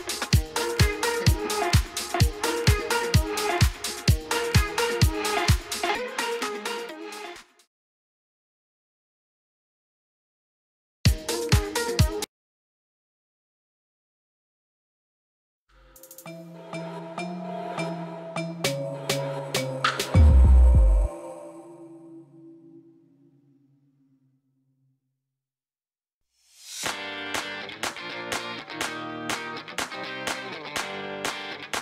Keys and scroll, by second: 13.3 shift+a, 15.5 s, 15.6 0, 16.1 Return, 26.4 2, 27.0 z, 28.7 ctrl+b, 29.7 a, 30.4 s, 30.7 y.